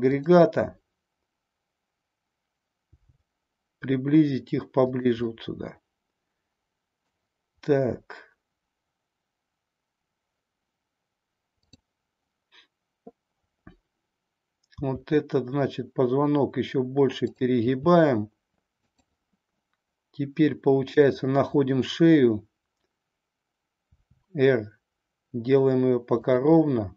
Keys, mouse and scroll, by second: 0.1-2.4 drag, 2.9 g, 4.9 click, 5.3 scroll up 1, 5.4-7.0 middle drag, 7.0 scroll down 1, 14.9 r, 18.9 click, 23.9 r, 26.3 click, 26.6-26.9 middle drag.